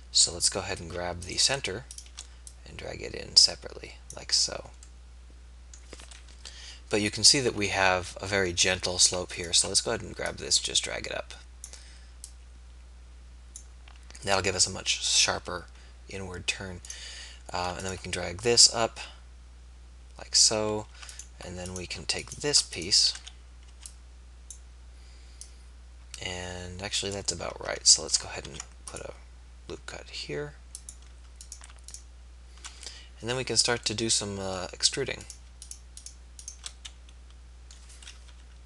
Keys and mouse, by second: 1.2 middle click, 6.5 KP_3, 23.2 a, 24.6 b, 28.5 ctrl+r, 38.3 KP_3.